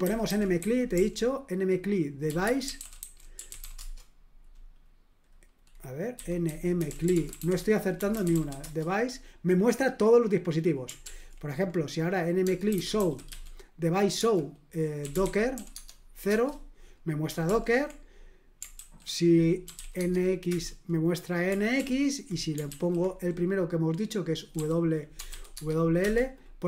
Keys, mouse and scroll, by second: 0.0-4.1 typing, 5.9-8.8 typing, 11.0 ctrl+p, 12.4-16.0 typing, 16.3 Return, 17.4 ctrl+p, 18.7 ctrl+w, 19.4-20.2 typing, 20.5 Return, 21.7 ctrl+p, 22.7 ctrl+w, 24.5 e, 25.3 w, 25.5 Tab, 26.0 Return.